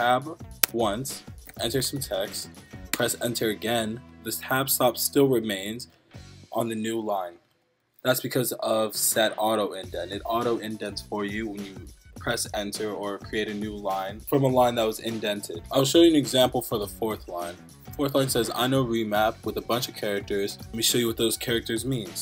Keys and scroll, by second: 1.2-2.4 typing, 2.9 Return.